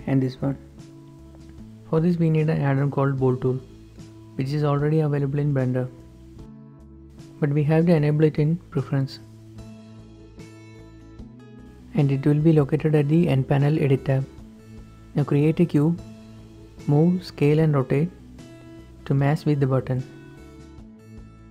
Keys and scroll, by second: 6.5-6.9 typing, 10.6 n, 14.4 shift+a, 15.3 Tab, 15.5 s, 15.9 s, 15.9 x, 16.4 g, 16.9 shift+Tab, 18.1-21.5 typing.